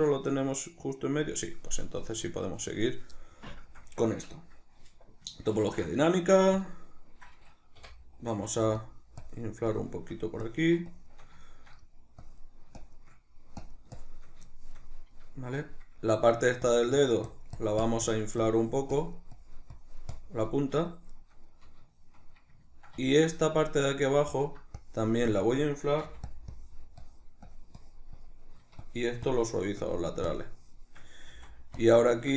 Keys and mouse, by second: 2.1 Tab, 5.6 ctrl+d, 7.8 i, 9.2-11.4 drag, 11.4 shift+middle click, 12.2-14.6 drag, 14.6-16.7 shift+middle drag, 16.7-21.5 drag, 21.5-24.8 middle drag, 24.8-26.4 drag, 26.0 f, 26.6-31.8 drag, 31.3 f, 32.1-32.3 shift+middle drag.